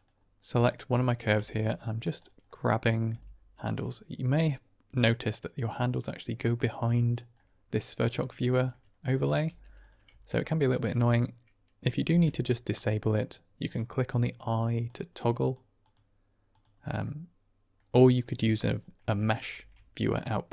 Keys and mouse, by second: 0.5-1.1 middle drag, 1.3 Tab, 2.4 middle click, 3.0 g, 3.5 click, 4.3-6.2 middle drag, 7.7 middle click, 8.2 shift+middle click, 8.6 middle click, 9.4 g, 9.7 click, 10.0 Tab, 12.0 ctrl+space, 12.7 middle click, 13.5 click, 14.0 click, 14.4 click, 14.8 click, 15.3 click, 15.7 click, 16.4 click, 16.9-17.8 middle drag, 18.9 middle click, 19.5 shift+a.